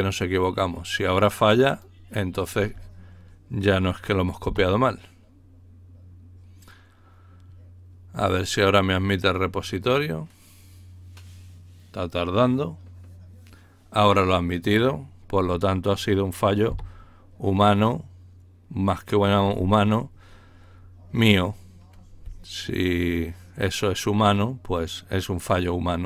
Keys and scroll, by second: 4.5 Return, 6.9 Return, 16.6 Return.